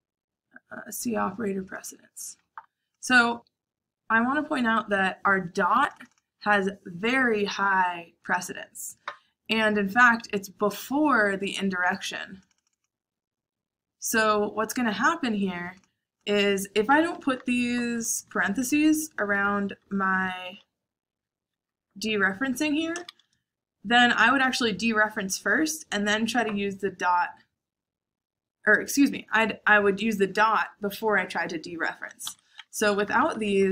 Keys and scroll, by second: 17.0 Escape, 17.3-20.6 typing, 21.6-22.9 typing, 32.2 Escape, 32.4-33.7 typing.